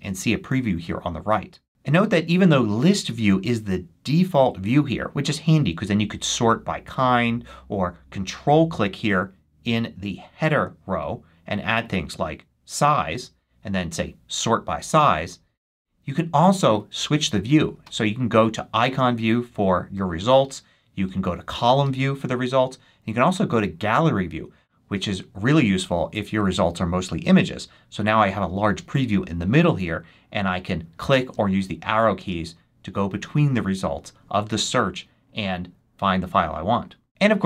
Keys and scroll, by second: 31.7 Left.